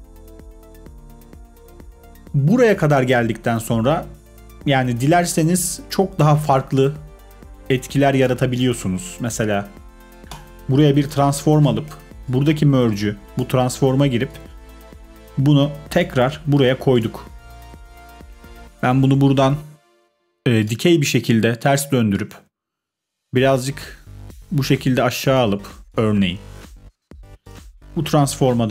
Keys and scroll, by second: 1.5 space.